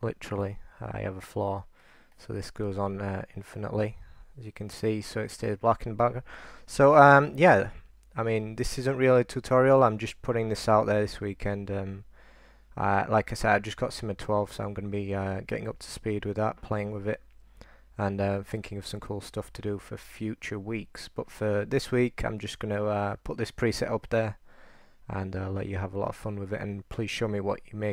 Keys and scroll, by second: 1.7-4.1 typing, 6.8-9.0 typing.